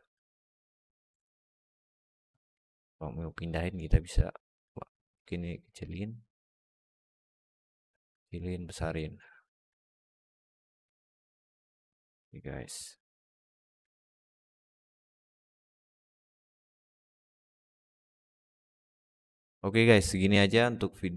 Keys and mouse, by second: 0.0 click, 2.4 middle click, 2.5 alt+click, 3.0 click, 4.0 click, 9.2 alt+middle drag, 10.1 click, 10.8-11.1 middle drag, 12.0 alt+middle drag, 13.0 shift+click, 13.8 alt+middle drag, 14.2 click, 16.2 right click, 16.8-17.2 alt+middle drag, 18.3 alt+shift+middle drag, 18.6 alt+middle click.